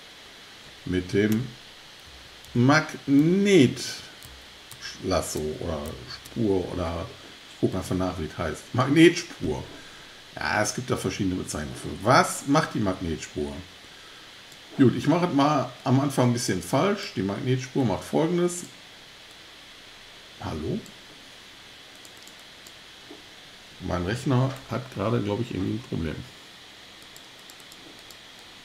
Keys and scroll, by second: 2.1 super+z, 2.5 super+z, 3.2 super+z.